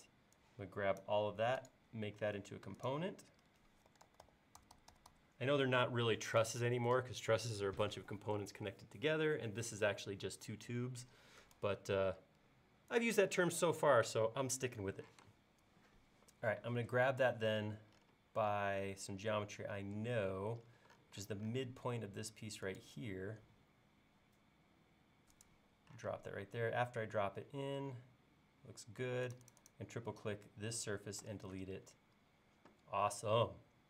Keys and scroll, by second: 3.7-4.7 typing, 5.8 typing, 15.2 m, 26.1 space, 31.2 BackSpace.